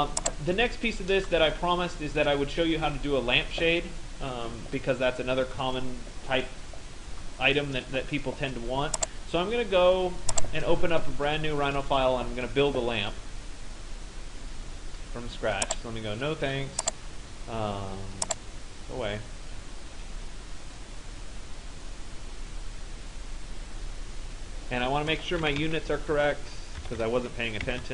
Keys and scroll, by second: 26.4-27.9 typing.